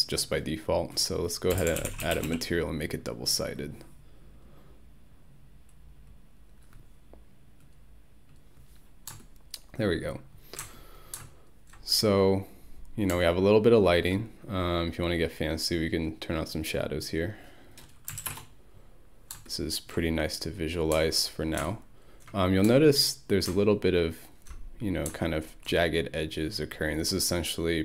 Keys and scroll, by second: 1.3-2.8 typing, 17.9-18.7 typing.